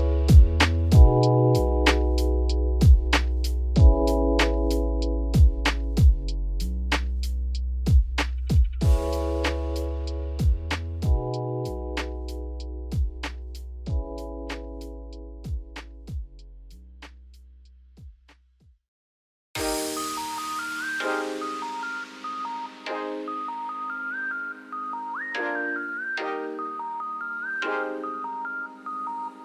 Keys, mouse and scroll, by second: 12.5 click, 17.4-18.6 scroll down 8, 18.6 click, 18.8-19.6 scroll up 5, 19.6 scroll up 1, 19.9 click, 21.8 ctrl+s, 23.6 click, 26.4 click.